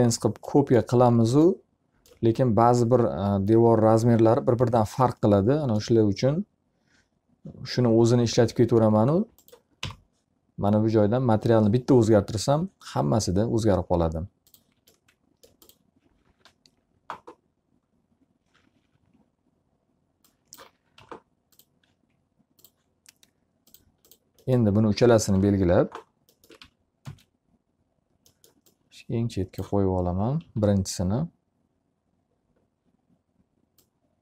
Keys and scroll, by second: 10.1 m, 19.1 F3, 21.7 v, 25.6 l, 27.4 w, 27.8 space, 31.2 s.